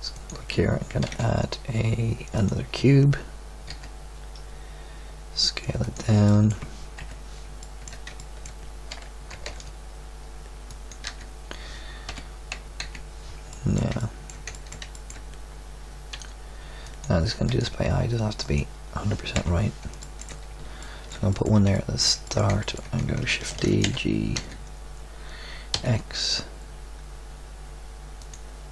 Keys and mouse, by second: 1.0 shift+a, 3.6 s, 6.9 KP_1, 9.3 g, 11.0 z, 12.1 KP_2, 12.8 KP_3, 16.1 r, 17.4 g, 19.3 KP_1, 23.5 shift+d, 23.8 g, 24.5 middle click.